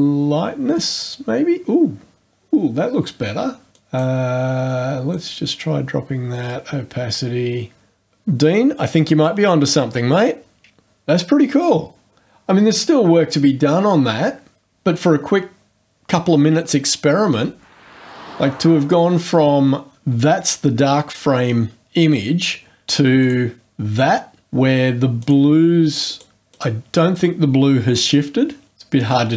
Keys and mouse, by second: 3.7 click, 5.1-8.0 drag, 18.8 click, 23.2 click, 25.2 click, 26.1 click, 26.5 click.